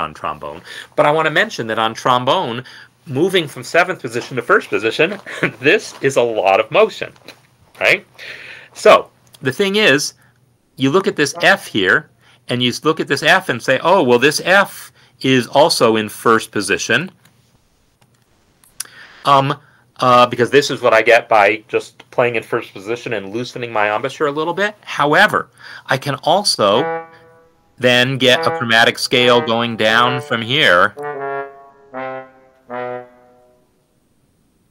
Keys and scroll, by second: 10.6 Escape, 11.5 ctrl+alt+f, 12.1 1, 12.7 Escape, 20.7 n, 22.6-27.3 typing, 23.7 Down, 25.8 Down, 30.7 Escape, 32.9 ctrl+alt+g, 33.5 ctrl+alt+f, 34.3-34.7 typing.